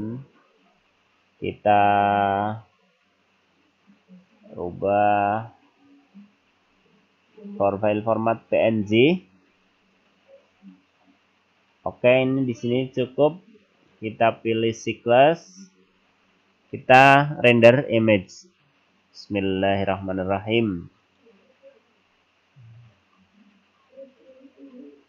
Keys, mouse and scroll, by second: 6.6-7.9 scroll down 2, 12.3-13.4 scroll up 8, 13.6 click, 17.1 click.